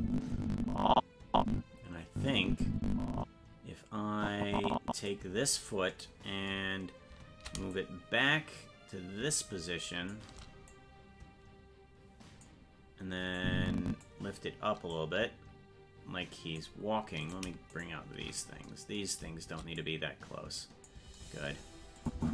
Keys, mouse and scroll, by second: 7.7-10.2 shift+drag, 10.7-12.5 drag, 13.4 click, 14.9-16.6 drag, 17.3 right click, 19.8-20.9 drag, 22.0 click, 22.2 space.